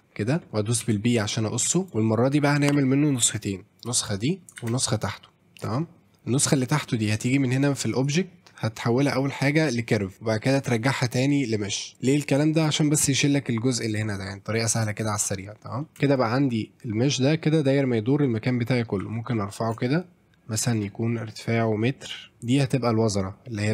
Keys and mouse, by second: 1.7 Tab, 1.9 middle click, 3.1-3.9 drag, 4.6 shift+d, 5.1-5.6 drag, 5.8 middle click, 6.5 middle drag, 7.9-10.1 drag, 10.6-11.9 drag, 11.9 middle click, 12.5 shift+middle drag, 15.3 middle click, 15.8 middle click, 15.9 Tab, 16.1 shift+middle click, 19.0 e, 19.4 middle click, 22.4 Tab, 22.5-23.7 drag.